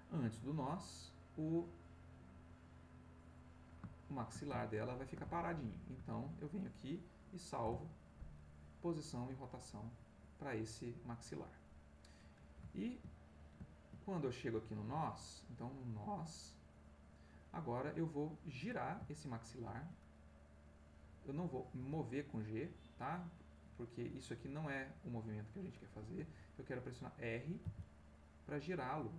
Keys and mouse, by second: 0.5-1.7 drag, 2.3 click, 3.0 click, 3.9 shift+middle click, 4.6-6.1 ctrl+shift+middle drag, 7.6 i, 9.8 click, 12.7 ctrl+middle click, 13.7 ctrl+middle click, 15.0-17.3 drag, 18.3 middle click, 19.1 ctrl+middle click, 20.6 click, 21.8 g, 26.0 Escape, 27.6 r.